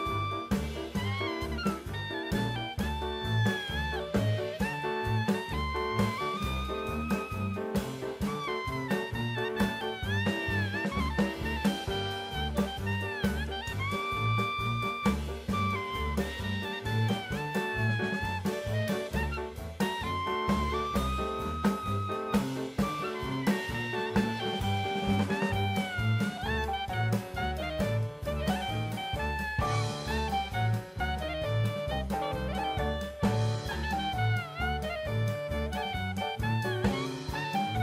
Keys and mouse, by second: 1.6-1.9 drag, 5.3 middle click, 6.1 click, 7.3 click, 7.9 middle click, 8.5-9.2 drag, 10.3 ctrl+t, 12.0 ctrl+z, 12.8-13.2 drag, 13.3 drag, 13.6 click, 14.3 ctrl+t, 15.7-16.3 drag, 16.5 click, 22.9 click, 25.6-27.6 drag, 26.7 KP_0, 28.7-29.9 drag, 29.3 KP_0, 30.4 click, 31.6-32.4 drag, 34.3-36.5 drag, 37.4-37.8 drag.